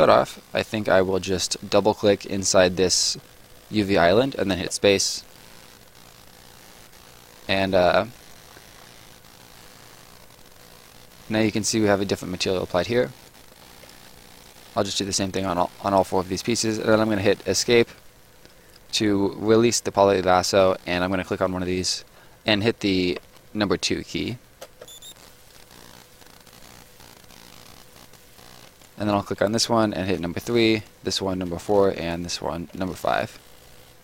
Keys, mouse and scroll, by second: 1.7 click, 4.5 space, 5.6 right click, 8.4-8.9 scroll up 1, 8.9 right click, 12.6 scroll down 1, 12.8 right click, 14.3 click, 15.0 click, 17.8 Escape, 21.2 click, 23.1 2, 24.6 space, 25.5 right click, 28.8 click, 30.1 3, 30.7 click, 31.4 4, 31.9 click, 32.7 5.